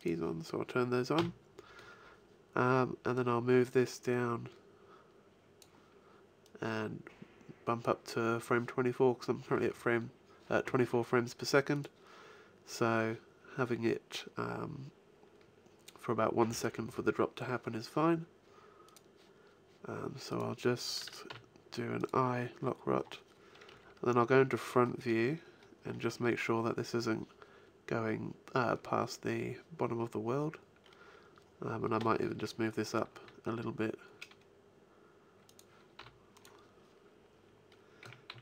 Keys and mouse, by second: 1.1 n, 3.1-4.9 drag, 6.4-8.3 drag, 14.1-15.8 drag, 21.2 i, 23.6 KP_1, 24.9 middle click, 32.7 g, 35.5 click, 35.9 i, 37.9 a, 38.2 z.